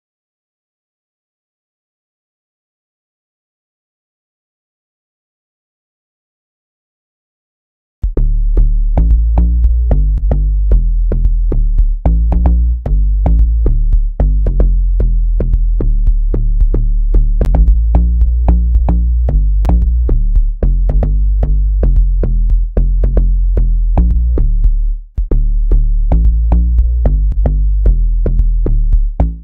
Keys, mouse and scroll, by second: 8.8 F7, 9.3 F9, 10.5 scroll, 12.0 click, 12.3 scroll, 16.6 click, 29.0 space.